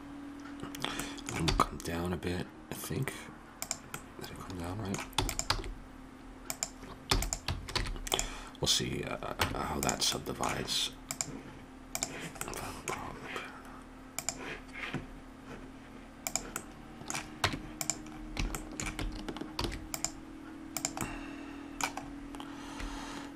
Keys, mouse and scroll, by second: 2.8-4.0 drag, 5.2 e, 5.4 s, 6.5 click, 7.1 e, 7.8 alt+m, 9.4 Tab, 11.1 click, 12.4-14.2 middle drag, 14.2-16.1 drag, 16.2 click, 16.6-18.6 middle drag, 17.4 Tab, 19.5 ctrl+r, 21.0-22.9 drag.